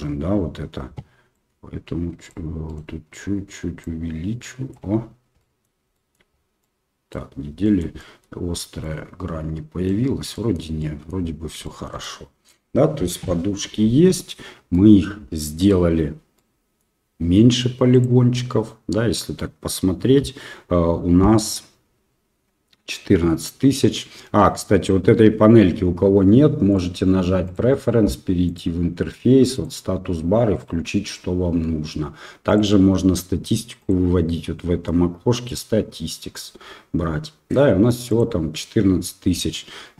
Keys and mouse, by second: 1.3-2.3 drag, 2.7 right click, 3.9 click, 5.5 middle click, 6.0 shift+middle click, 6.7-7.1 middle drag, 7.6 shift+middle drag, 8.1 middle click, 8.9-9.9 middle drag, 10.4 middle click, 10.9 middle click, 11.7 shift+middle click, 12.0-12.5 middle drag, 14.8 middle click, 16.4 middle click, 18.0 click, 26.7 click, 33.8-38.4 drag.